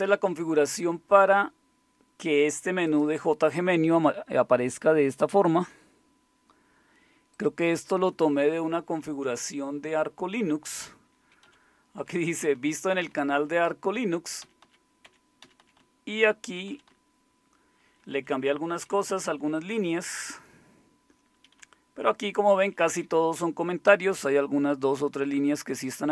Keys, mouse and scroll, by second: 2.8-5.4 drag, 7.4-11.4 drag, 11.4 Down, 12.0 Right, 12.3 Right, 12.5 Right, 12.7 Right, 12.9 Right, 13.3 Right, 13.9 Right, 14.4 Down, 14.6 Down, 15.0 Up, 15.4 Down, 15.6 Down, 15.8 Down, 16.4-17.9 Down, 18.6 Down, 18.7 Down, 19.1 Down, 19.5 Down, 20.1-22.7 Down, 23.0-26.1 Down.